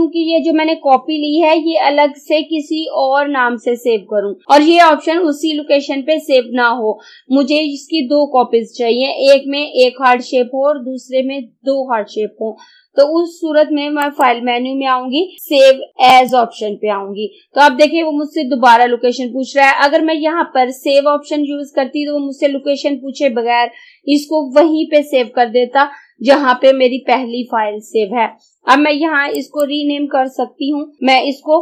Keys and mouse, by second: 1.4 click, 14.0 click, 16.2 click, 29.4 click, 30.7 BackSpace.